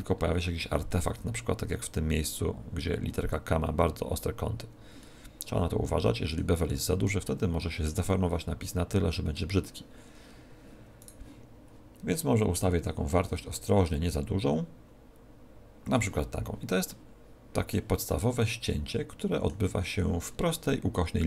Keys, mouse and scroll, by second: 0.1-0.9 scroll up 10, 3.3-4.3 scroll down 4, 4.3-4.9 scroll down 9, 4.9 middle click, 7.2 shift+middle click, 8.0 middle click, 10.9 right click, 12.5 click, 16.8 middle click, 18.0 middle click, 19.7-21.2 scroll up 17.